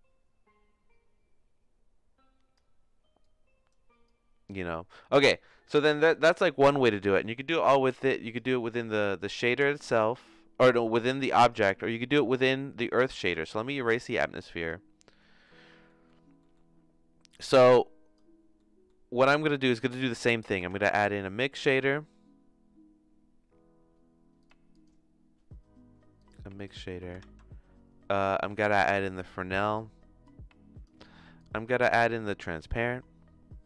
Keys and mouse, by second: 3.2 click, 4.0 click, 9.4-10.8 drag, 12.2 x, 13.2 ctrl+z, 13.4 click, 13.8 x, 14.6 click, 15.2 middle click, 15.8 middle click, 17.2 click, 17.6 click, 18.5 middle click, 19.9 middle click, 20.7 shift+a, 27.2 shift+a, 30.3 click, 31.4 click, 31.8 shift+a.